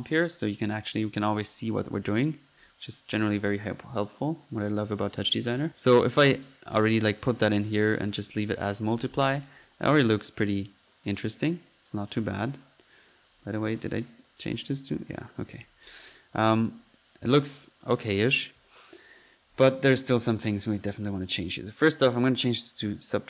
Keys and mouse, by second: 0.0-0.6 typing, 0.7 drag, 2.0 middle click, 2.6-5.6 drag, 9.1 click, 9.2 F1, 9.9 click, 11.4-12.1 typing, 13.4 click, 14.2 click, 15.6-16.1 drag, 16.6-17.3 typing, 17.2 click, 17.4 F1, 19.5 Escape, 20.0 middle click, 20.1-20.9 typing, 20.4-20.9 drag, 21.0-21.5 drag, 21.7-22.2 drag.